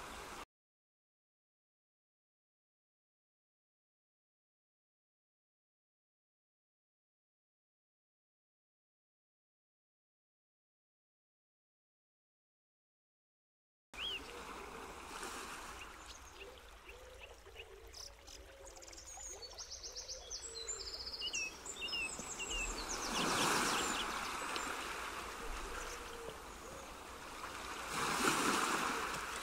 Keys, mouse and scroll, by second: 8.5 click, 9.3 ctrl+z, 10.1 g, 13.5 ctrl+right click, 14.9 ctrl+right click, 16.6 ctrl+right click, 17.9-18.3 scroll up 2, 19.4 z, 21.6 z, 26.3 click, 28.1 click.